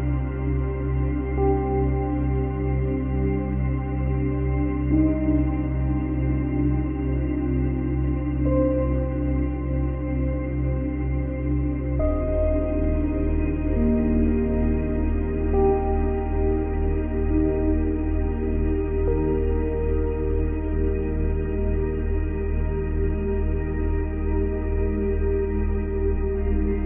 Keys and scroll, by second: 0.5 space, 1.1 ctrl+z, 4.5 space, 6.6 space, 9.2 space, 10.7 space.